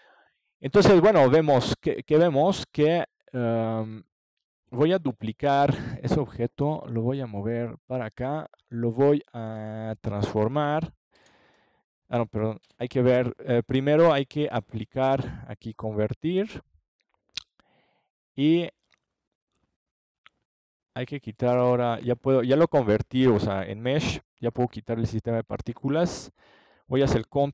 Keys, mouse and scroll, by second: 0.2-3.3 drag, 3.3 middle click, 7.3 click, 7.5-9.0 middle drag, 9.0 click, 10.6-12.4 drag, 14.9 ctrl+j, 16.7-18.2 drag, 18.4 Tab, 20.3 a, 20.8 a, 22.3 a, 22.9 Tab, 26.0 ctrl+s.